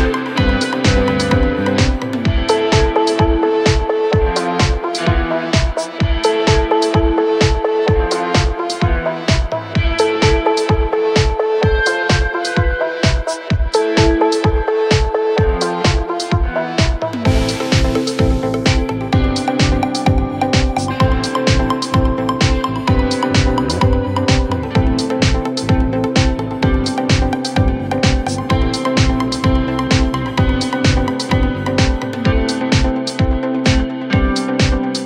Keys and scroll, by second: 9.2 ctrl+z, 17.5 ctrl+z, 28.4 ctrl+z.